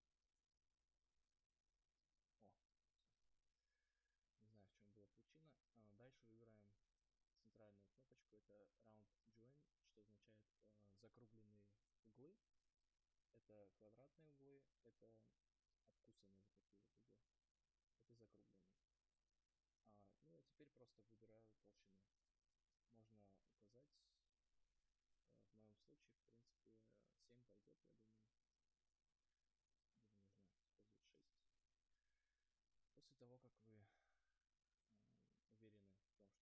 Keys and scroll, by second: 31.4 Return.